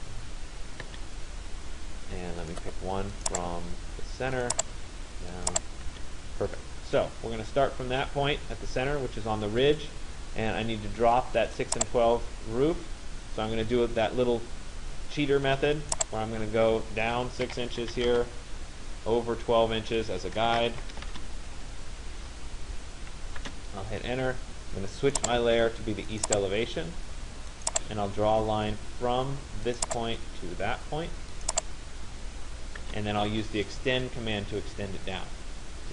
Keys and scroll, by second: 0.6 Return, 5.6 Return, 17.1 6, 18.2 Return, 20.6 2, 21.2 Return, 32.6 Return.